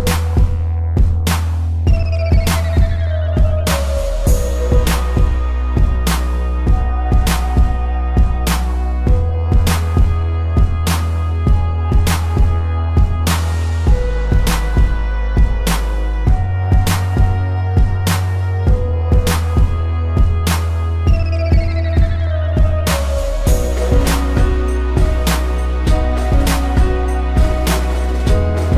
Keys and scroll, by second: 2.1 z, 3.0 space, 3.8 a, 4.7 Delete, 5.4 space, 9.4 z, 10.5 space, 11.2 p, 14.2 a, 15.5 a, 17.8 Delete, 18.7 ctrl+-, 19.8 space, 21.6 space, 23.7 z, 24.3 space, 25.7 p.